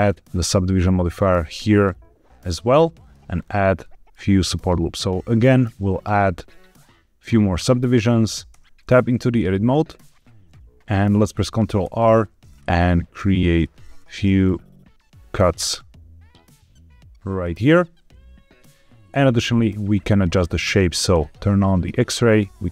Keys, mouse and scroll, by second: 2.7 middle click, 3.3-3.7 scroll up 2, 3.7 middle click, 5.9 click, 8.4 Tab, 9.0 middle click, 9.6 1, 11.8 ctrl+r, 13.5 click, 13.9 ctrl+r, 17.2 click, 21.0 click, 21.5 middle click, 22.3 click.